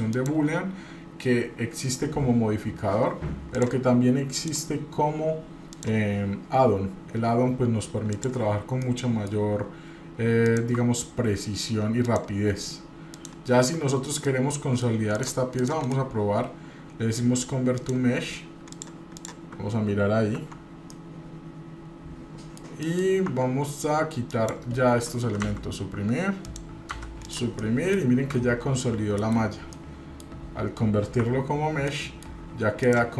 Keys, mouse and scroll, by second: 0.1-3.2 drag, 3.5 click, 4.4-6.3 drag, 8.8-9.3 middle drag, 10.4 click, 12.0 shift+click, 13.2 shift+click, 14.3-14.9 middle drag, 15.1 click, 15.6 click, 15.8-18.7 right drag, 18.7 drag, 19.2 click, 20.3 Tab, 20.9-22.6 middle drag, 22.8 middle click, 23.3 Tab, 24.4 click, 25.3 Delete, 25.4 Delete, 26.4 click, 26.9 Delete, 27.2 click, 27.3-28.0 middle drag, 27.3 scroll down 2, 28.1-28.6 scroll up 2, 28.6 scroll down 2, 29.2 KP_Divide, 29.6 scroll down 1, 29.7-30.3 middle drag, 31.2 Tab, 31.9 middle click, 32.8 click.